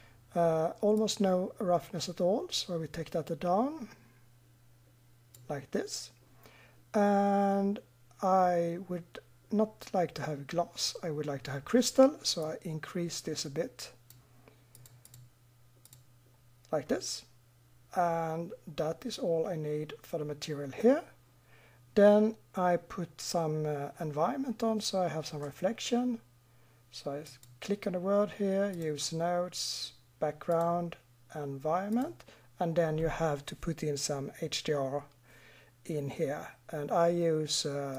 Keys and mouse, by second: 1.0-2.9 middle drag, 12.4-14.4 middle drag, 14.8 middle click, 27.2-33.0 middle drag.